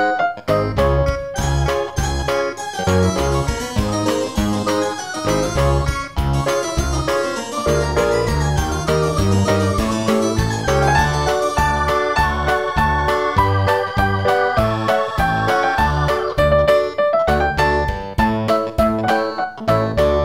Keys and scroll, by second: 9.6 super+v.